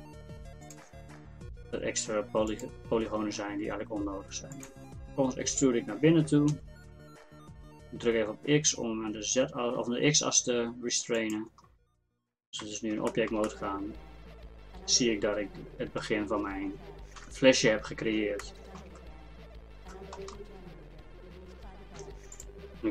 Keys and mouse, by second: 1.1 e, 3.1 e, 4.9 e, 11.7 middle click, 12.6 Tab, 17.2 KP_1, 22.0 Tab.